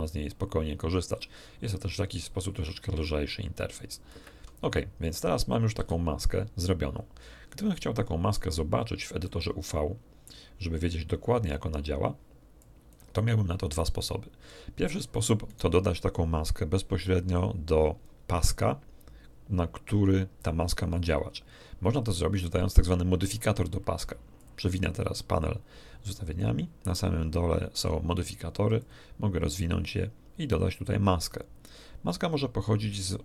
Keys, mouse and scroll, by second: 4.1 shift+space, 5.8 n, 6.4 scroll down 1, 6.9 scroll up 2, 7.6 middle click, 8.8 scroll up 2, 9.2-10.4 middle drag, 12.6 click, 15.4 right click, 24.4-27.0 drag, 28.8 click, 31.2 click, 32.1-32.8 scroll down 1.